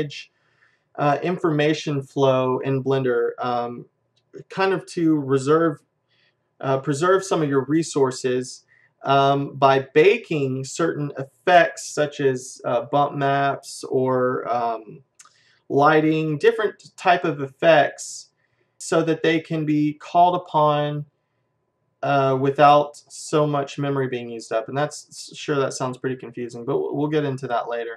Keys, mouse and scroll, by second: 27.4 click.